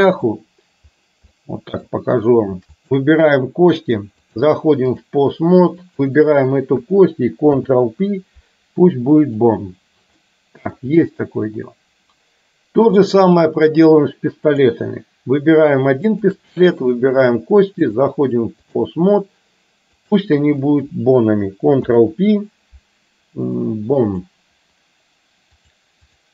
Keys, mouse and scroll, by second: 0.3 click, 1.4-1.9 middle drag, 2.9 shift+click, 4.3-5.3 drag, 6.0 click, 10.3 middle click, 12.9-13.8 drag, 16.1 shift+click, 18.1 click, 20.1 click, 21.9 ctrl+p, 25.6 click.